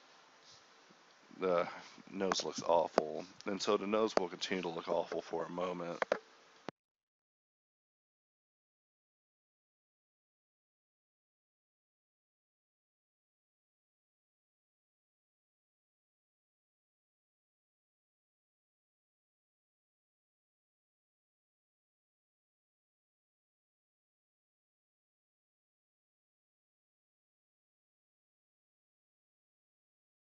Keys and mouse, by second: 0.1 Tab, 0.6 Tab, 1.4 shift+d, 2.0 z, 2.4 KP_Divide, 2.6 KP_1, 3.0 a, 3.3 Tab, 3.6 ctrl+r, 4.3 a, 6.2 Tab, 7.1 Tab, 8.1 x, 8.4 KP_Divide, 8.7 KP_1, 8.9 z, 9.9 Tab, 10.5 Tab, 10.6 z, 11.6 a, 11.9 k, 13.9 a, 14.3 k, 15.6 z, 15.9 click, 16.1 click, 16.3 z, 16.4 Tab, 16.6 click, 17.0 Tab, 17.1-19.4 drag, 17.4 Tab, 18.3 Tab, 19.7 h, 20.4 Tab, 21.1 a, 22.4 z, 24.1 KP_1, 24.5 z, 25.1 ctrl+Tab, 25.4 z, 25.8 g, 26.9 alt+m, 27.8 g, 28.3 z, 28.6 g, 28.9 right click, 29.1 middle click, 29.5 right click, 29.8 alt+m.